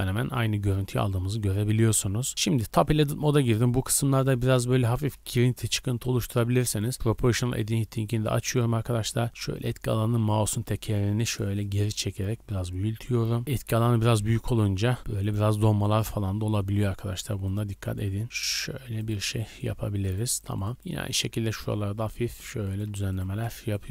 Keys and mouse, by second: 2.6 Tab, 3.0 1, 3.3 click, 5.2-6.8 shift+drag, 6.9-15.7 drag, 7.3 g, 9.0 g, 13.4 g, 16.2-17.9 drag, 16.2 g, 18.1 g, 18.5 click, 18.6 g, 19.6-21.1 drag, 19.7 g, 20.7 g, 21.2-22.7 drag, 21.7 g, 22.9-23.9 drag, 22.9 g.